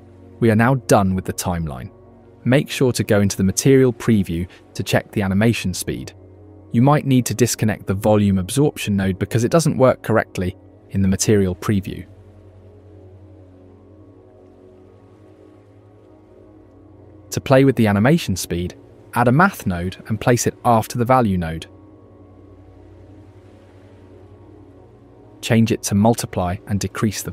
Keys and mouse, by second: 3.2 click, 8.5 click, 15.2 space, 17.9 click, 18.6 click, 19.9-21.7 drag, 22.2 shift+a.